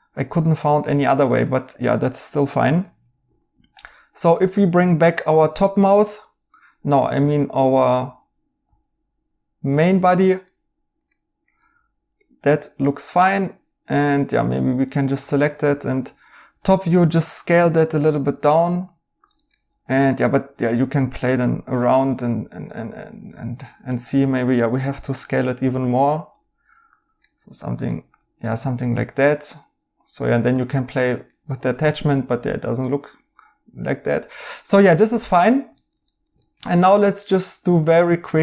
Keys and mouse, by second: 2.6 right click, 6.0 right click, 10.0 right click, 12.9 right click, 14.3 Tab, 19.5 right click, 24.5 s, 27.2 right click, 30.5 right click, 32.8 right click, 35.7 right click.